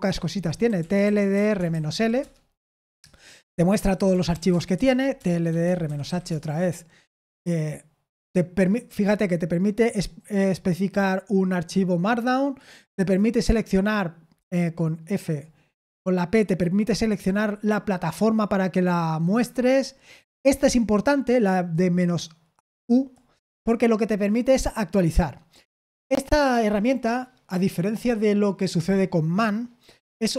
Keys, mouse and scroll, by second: 0.8-2.4 typing, 4.0-6.5 typing.